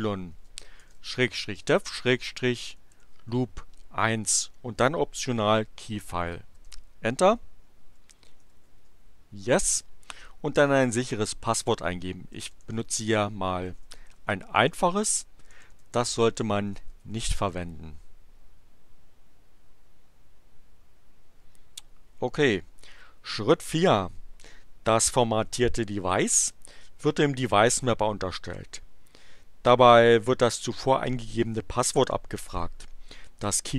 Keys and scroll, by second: 0.3-3.6 typing, 6.5 Return, 7.6-9.0 typing, 9.5 Return, 12.1-17.6 typing.